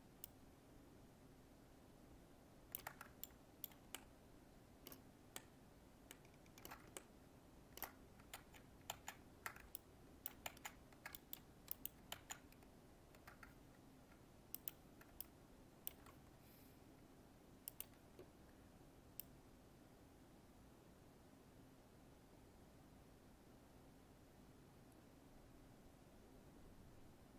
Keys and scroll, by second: 8.4 ctrl+z.